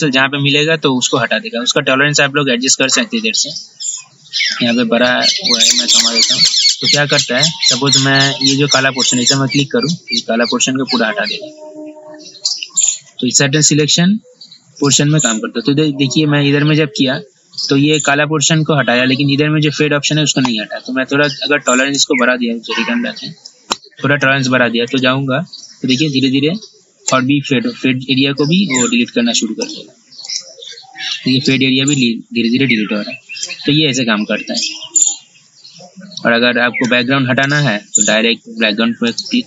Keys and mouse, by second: 22.2 ctrl+z, 23.6 click, 27.3 ctrl+z, 28.9-31.5 drag, 33.6 ctrl+z, 37.1 ctrl+z, 37.7 ctrl+z, 39.3 click.